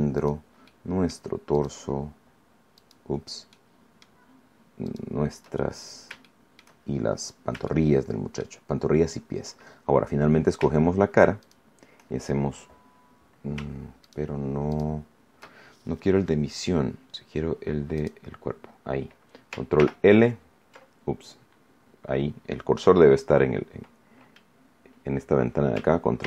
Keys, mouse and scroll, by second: 0.1 shift+right click, 0.6 shift+middle click, 1.5 shift+right click, 2.7 shift+right click, 3.5 shift+middle click, 3.9 shift+scroll up 1, 4.8 shift+right click, 5.5-6.0 shift+scroll down 2, 6.1 shift+middle click, 6.9-7.5 shift+scroll up 5, 7.6 shift+middle click, 11.3 shift+right click, 13.9 shift+right click, 14.7 shift+right click, 17.9 click, 19.7 ctrl+l, 26.1 ctrl+l.